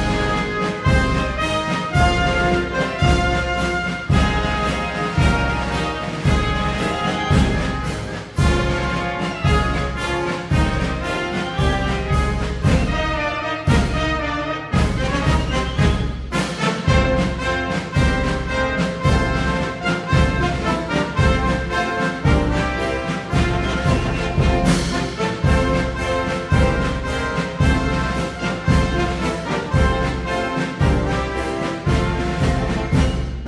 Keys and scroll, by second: 4.6 super+d, 31.6 BackSpace, 31.8 Left, 32.0 Left, 32.1 Left, 32.2 Left, 32.4 Left.